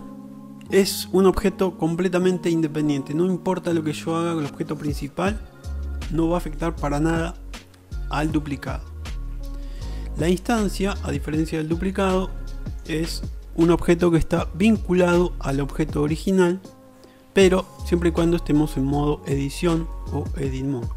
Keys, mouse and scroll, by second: 9.7-10.5 shift+middle drag, 11.8-12.5 shift+middle drag, 12.7-13.1 middle drag, 20.1-20.9 middle drag.